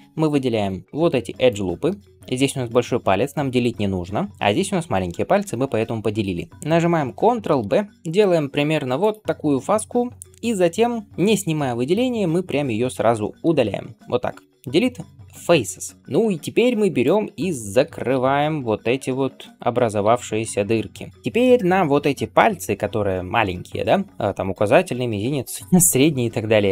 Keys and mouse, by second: 7.2 ctrl+b, 13.3 x, 18.0 f, 19.5 alt+click, 19.6-26.7 middle drag, 19.9 f.